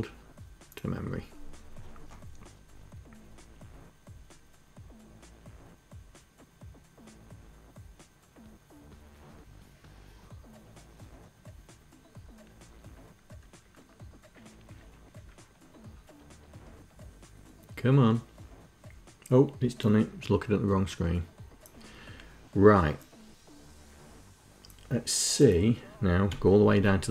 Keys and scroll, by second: 26.0 Page_Down.